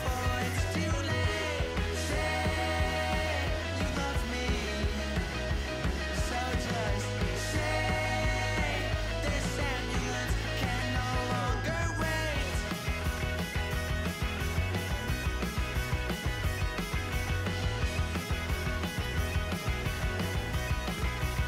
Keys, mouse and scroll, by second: 2.4 click, 4.4 middle click, 4.4 KP_0.